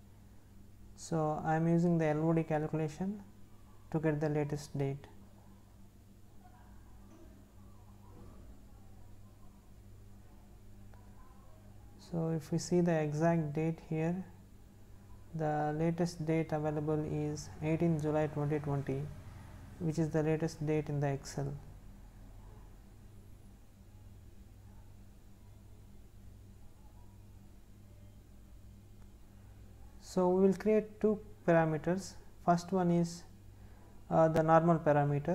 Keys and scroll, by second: 1.5 Left.